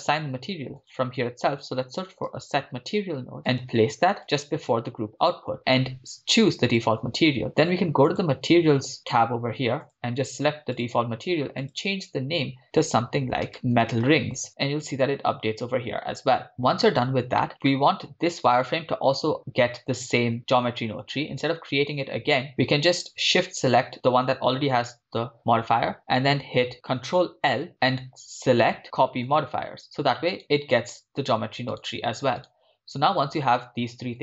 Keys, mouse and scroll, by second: 0.0 shift+a, 5.6-6.9 drag, 8.1 click, 9.8-11.0 drag, 11.9-14.5 drag, 14.8-16.1 scroll up 3, 16.1-16.5 scroll up 1, 16.5-17.4 scroll down 6, 17.4-18.1 shift+middle drag, 17.5 scroll up 3, 18.5-20.1 right drag, 23.3 shift+right click, 27.2 ctrl+l, 30.4 right click, 32.0 right click, 33.2 right click.